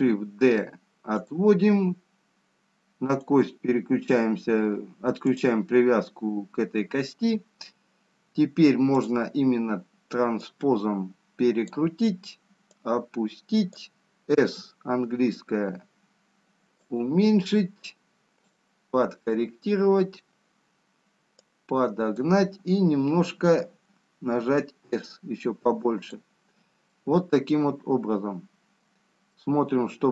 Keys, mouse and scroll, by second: 0.6 shift+d, 4.3 click, 6.7 click, 9.9 click, 10.7 click, 13.7 click, 15.3 s, 18.8 click, 21.9 click, 24.9 s, 29.0 middle click.